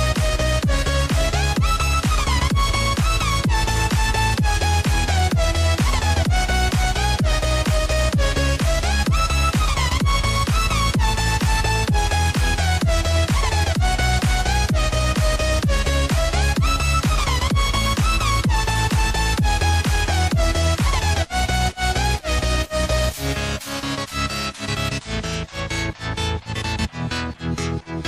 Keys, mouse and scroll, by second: 6.3 click, 10.4 click, 11.6 click, 12.6 click, 13.2 s, 17.1 click, 19.5 click, 20.8 click, 23.9 click, 26.5 click.